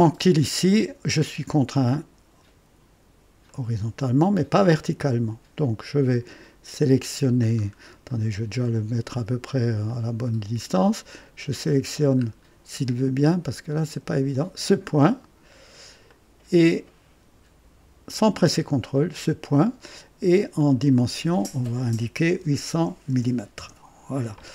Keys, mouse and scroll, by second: 3.4-5.5 drag, 7.4-7.7 scroll down 2, 8.1-8.7 right drag, 9.8-10.7 drag, 12.1 scroll up 2, 14.3 click, 15.1 right click, 16.0-17.0 right drag, 18.9 click, 20.5 click, 22.3 KP_8, 22.6 KP_0, 23.5 Return.